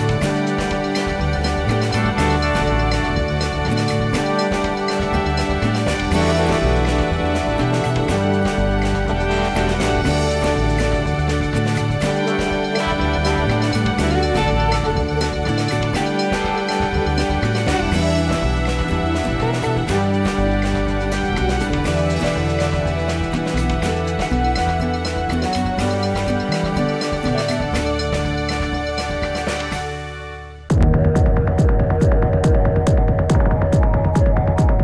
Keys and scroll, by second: 17.9 space.